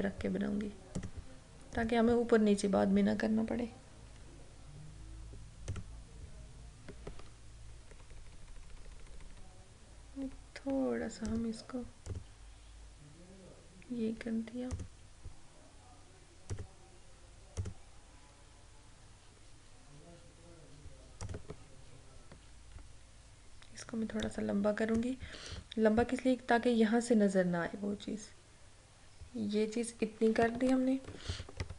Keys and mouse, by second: 1.1 click, 1.9 right click, 5.8 click, 8.0 Left, 11.4 click, 14.8 click, 21.3 click, 24.3-25.6 drag, 31.2 click, 31.4 ctrl+-.